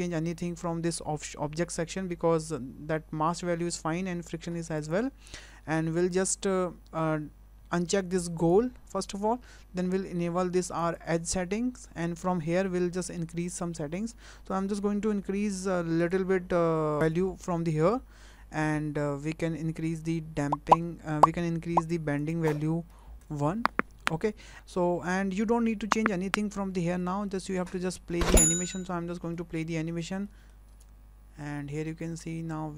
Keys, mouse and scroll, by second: 4.8 click, 8.4 click, 10.8 click, 16.0 click, 17.0 click, 22.2 click, 27.3 shift+middle click, 29.0-29.3 scroll down 2, 29.3 middle click, 30.3 middle click, 30.7 space.